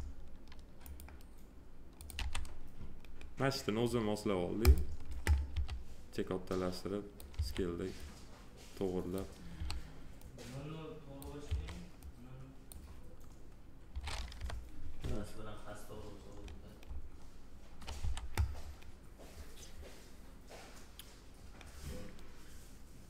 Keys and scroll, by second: 2.1 f, 5.5 r, 7.3 w, 9.5 r, 11.4 w, 14.3 p, 18.0 f.